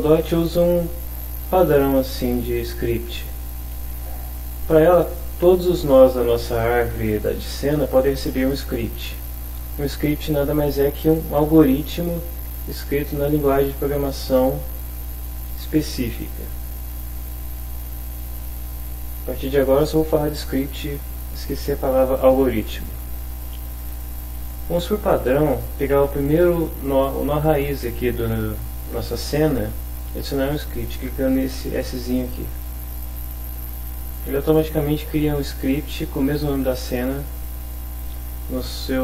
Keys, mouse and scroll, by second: 18.0 click, 32.5 click.